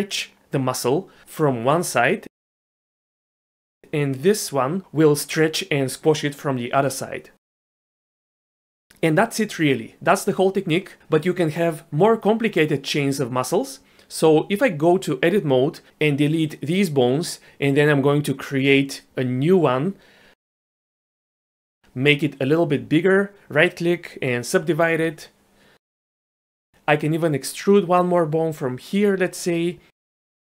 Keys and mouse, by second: 0.6 g, 5.2 click, 5.6 g, 14.4 Tab, 15.3 a, 16.3 x, 18.5 shift+a, 18.9 click, 20.2 g, 21.0 click, 21.5 shift+drag, 22.2 click, 23.0-24.6 right drag, 25.8 click, 26.9 click, 27.6 click, 29.2 e.